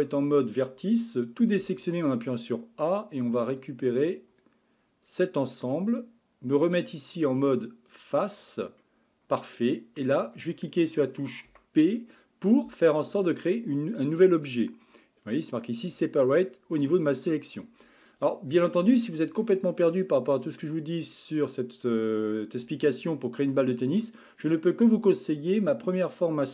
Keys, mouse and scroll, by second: 1.6 a, 3.6 click, 7.9 click, 8.8-11.5 middle drag, 11.5 p, 18.8 Tab, 19.4-20.6 middle drag, 20.6 scroll up 1, 21.0 click.